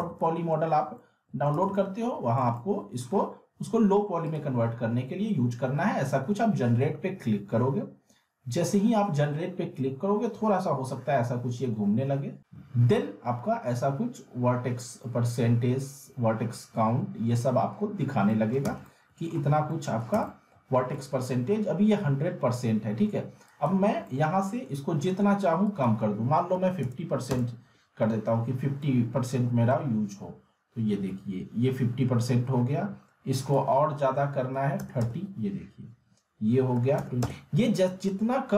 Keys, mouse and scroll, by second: 0.9-1.6 alt+middle click, 1.5-3.2 z, 4.2 click, 18.2 alt+Num_Lock, 18.3 alt+middle click, 18.6-19.5 z, 19.5 scroll up 1, 19.7-20.9 alt+middle click, 20.1 z, 20.3-21.5 alt+middle drag, 23.5 click, 24.1-24.6 alt+middle drag, 25.7 click, 28.3 click, 28.8-29.4 alt+middle click, 29.5 scroll up 2, 29.7-32.5 alt+middle drag, 33.4 click.